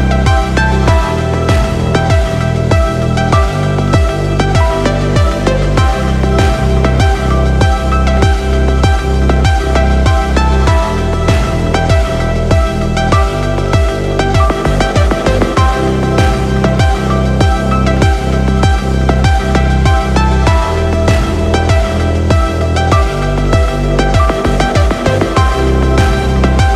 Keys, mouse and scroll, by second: 0.6 click, 1.1-1.9 scroll down 2, 2.1 click, 3.8 n, 4.6 n, 5.2 scroll down 1, 5.4 middle click, 6.5-7.0 scroll up 1, 7.1 shift+middle click, 11.2 n, 11.6 click, 12.0 click, 12.3 click, 12.5 n, 14.1 g, 15.0 right click, 16.2 i, 24.7 click, 26.6 g.